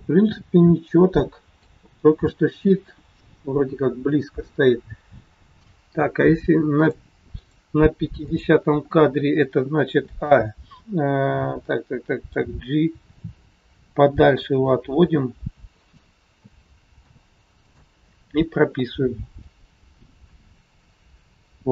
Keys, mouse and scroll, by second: 3.6-4.1 scroll up 2, 6.7 click, 7.2 click, 10.0 click, 10.0 a, 15.9 g, 16.3 a, 17.0 i, 19.5 click.